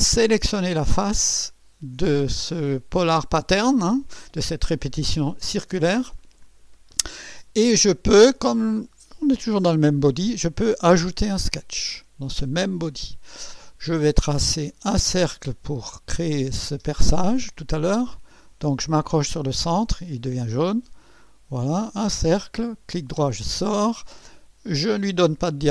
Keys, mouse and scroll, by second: 0.3 click, 11.2 click, 15.9 click, 20.3 click, 22.0 click, 22.9 right click.